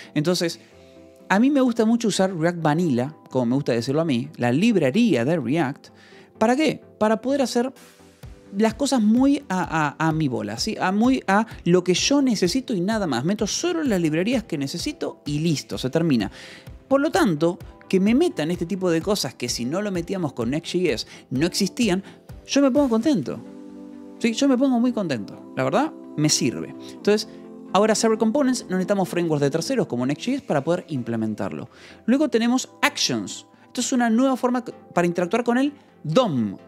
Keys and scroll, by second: 31.9 Escape, 32.5 j, 33.7 shift+v, 34.1 Escape.